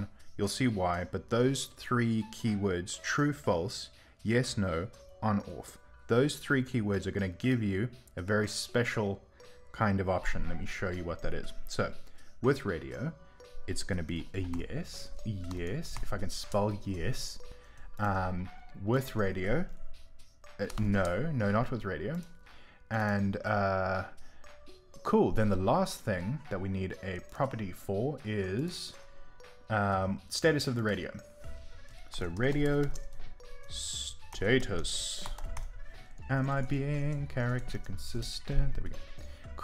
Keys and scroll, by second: 23.9-24.7 typing.